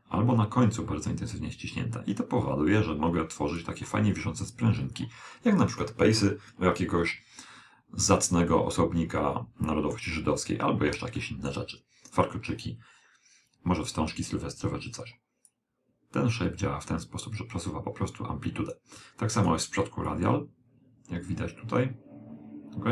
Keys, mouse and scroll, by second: 8.6-10.3 middle drag, 10.4-11.3 scroll up 1, 11.3-13.1 middle drag, 15.5 click, 19.4-21.9 drag.